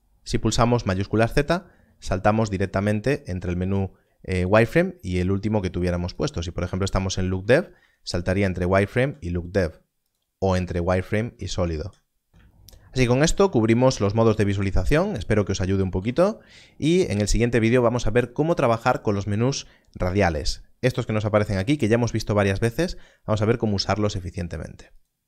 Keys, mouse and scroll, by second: 0.9-3.5 typing, 6.0 shift+z, 7.1 click, 7.3 shift+z, 7.7 shift+z, 8.1 shift+z, 8.5 shift+z, 10.0 click, 10.7 shift+z, 10.9 shift+z, 11.3 shift+z, 11.5 shift+z, 15.9 alt+a, 24.9 z, 25.1 click.